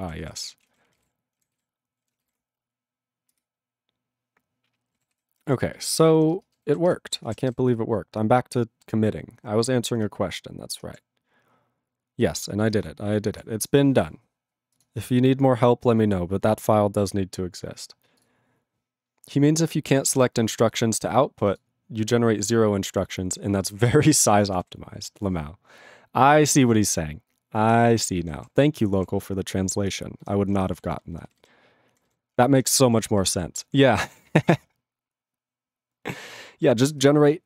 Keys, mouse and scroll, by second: 0.2 ctrl+s, 0.6 ctrl+space, 0.6 ctrl+a, 0.7 ctrl+p, 0.9 ctrl+g, 1.0 ctrl+e, 1.5 ctrl+s, 3.4 ctrl+Return, 3.9 ctrl+Return, 5.1 ctrl+s, 5.3 ctrl+n, 5.4 ctrl+n, 5.7 ctrl+n, 5.9 ctrl+n, 6.1 ctrl+n, 6.3 ctrl+space, 6.8 ctrl+alt+b, 6.9 ctrl+g.